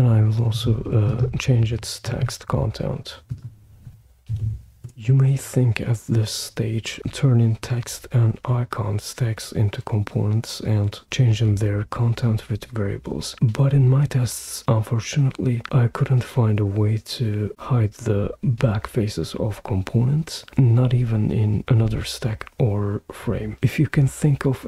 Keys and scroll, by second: 4.3 super+v, 4.8 Return.